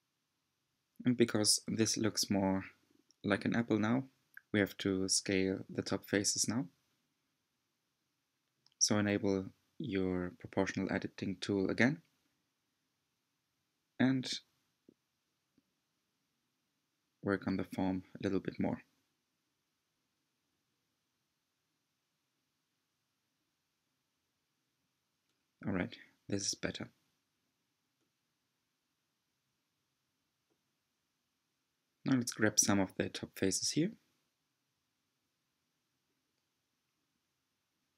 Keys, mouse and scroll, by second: 0.2 Tab, 4.7 click, 6.2 click, 7.4 s, 20.3 alt+z, 21.6-24.7 middle drag, 26.7 3, 27.5 click, 28.9-29.9 shift+drag, 29.9-33.6 middle drag, 33.6 shift+click, 34.1-35.6 shift+drag, 35.6-37.2 middle drag, 37.2-37.9 shift+drag.